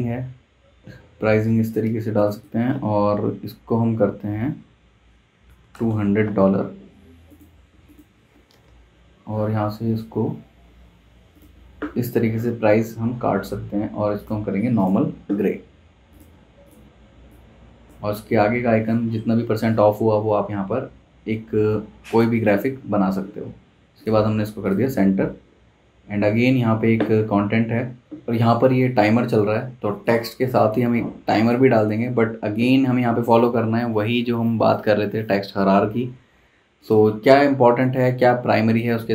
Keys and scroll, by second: 5.2-6.3 typing, 8.5 typing, 9.0 Escape, 22.9 super+g.